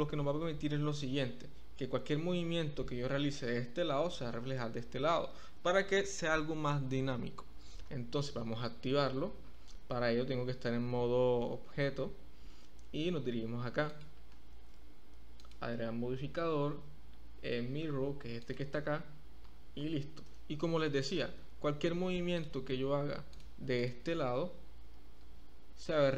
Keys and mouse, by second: 8.8 Tab, 15.3-18.6 drag, 20.3 Tab, 21.0 Tab, 21.4 Tab, 22.3 click, 23.3 click, 23.7 click, 25.2 g.